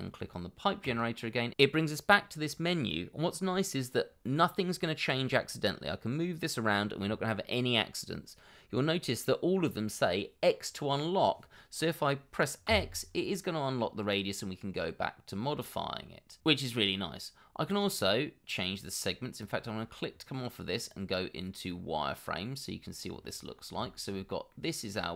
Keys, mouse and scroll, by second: 12.7 x, 23.5 scroll up 1, 23.8 shift+middle click, 24.5 middle click.